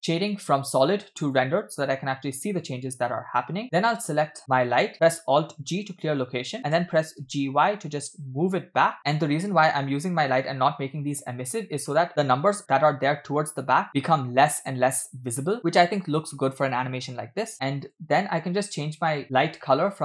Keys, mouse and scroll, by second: 1.7 click, 4.4 click, 5.8 alt+g, 6.8 g, 17.9 click, 19.9 click.